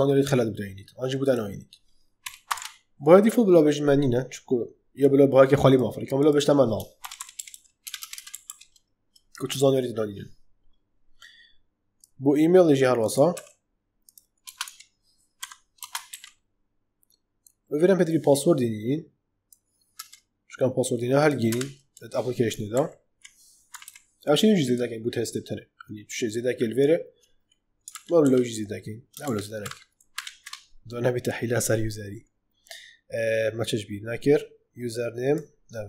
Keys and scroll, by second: 2.2 ,, 2.5 shift+', 6.7-8.2 typing, 13.3 ctrl+c, 14.4 space, 15.3 =, 15.7 space, 16.0 ctrl+v, 19.9 BackSpace, 21.4 BackSpace, 22.6 ctrl+z, 23.6 /, 27.8 ctrl+z, 29.2 ctrl+shift+z.